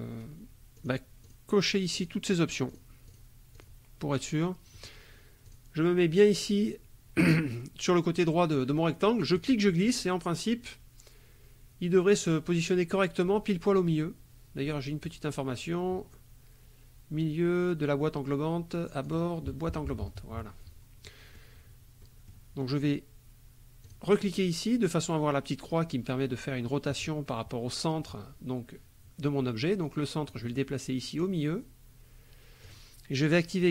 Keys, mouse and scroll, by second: 0.8 click, 1.2 click, 1.6 click, 2.0 click, 2.7 click, 3.1 click, 3.5 click, 4.7 click, 5.4 click, 9.3-19.2 drag, 19.7 KP_Subtract, 21.0 click, 22.0 click, 23.8 click, 30.3-32.8 drag.